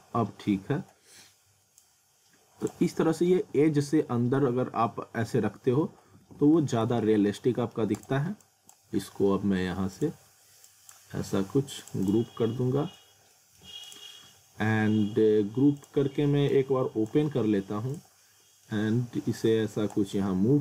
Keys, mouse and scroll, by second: 0.1 scroll up 1, 1.8 click, 3.4 z, 4.1-4.5 scroll up 1, 5.4 z, 6.1 w, 6.6 z, 7.3 alt+middle click, 7.8 scroll down 1, 8.0 click, 11.7 click, 12.4 scroll up 1, 12.6 alt+middle click, 13.9 click, 18.2 alt+middle click, 19.4 click.